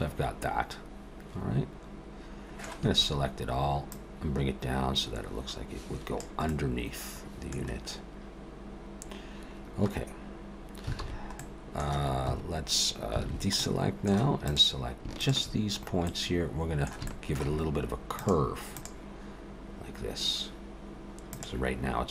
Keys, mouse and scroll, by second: 2.8 a, 3.9 click, 6.5 middle click, 11.0 alt+s, 13.2 alt+a, 13.6 middle click, 14.4 click, 15.2 shift+click, 15.7-16.1 scroll up 2, 16.1 middle click, 17.1 shift+middle click.